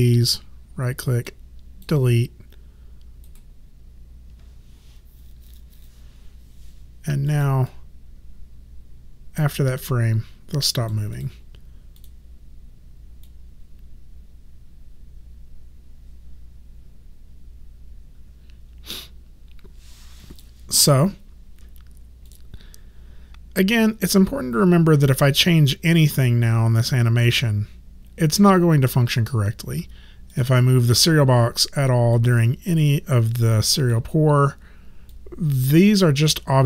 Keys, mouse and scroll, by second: 0.3 right click, 1.3 click, 3.3 right click, 7.3 click, 11.2 click, 22.3 click, 29.2 click, 34.3 click.